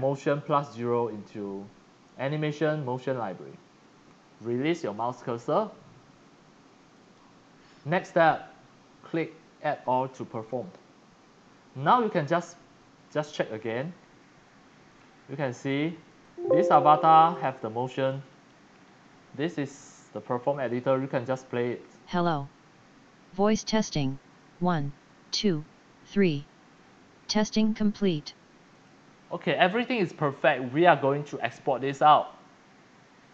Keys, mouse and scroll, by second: 0.4-4.9 drag, 6.9 click, 10.4 click, 11.9 click, 12.8 click, 14.1-14.4 scroll down 3, 14.9 click, 15.7 click, 16.1 x, 16.2 click, 17.3 click, 17.8-18.1 x, 17.8 click, 18.2 c, 18.3 click, 18.5 click, 21.9 click, 22.1 click, 28.7 click, 30.9 click, 31.7 click.